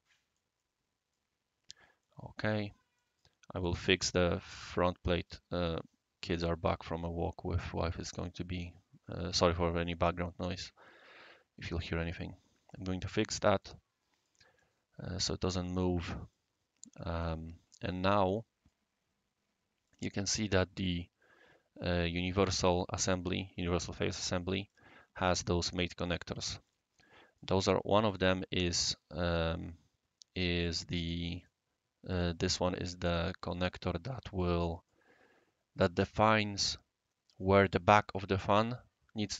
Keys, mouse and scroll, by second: 0.6-1.2 right drag, 1.4 scroll down 1, 1.4 scroll up 1, 1.7 scroll down 1, 1.8 scroll up 1, 2.0-2.4 right drag, 2.6 scroll up 1, 2.6 scroll down 1, 2.9 right click, 3.8 right click, 12.7 click, 13.2 click, 13.6 right click, 14.6-15.9 drag, 16.3 right click, 17.2 click, 17.9-18.7 right drag, 19.8 click, 24.6 click, 25.3 click, 26.0 click, 26.6 click, 27.1 right click, 28.0 click, 29.3-30.4 right drag, 30.6 click, 31.4 click, 33.1 click, 34.4 right click.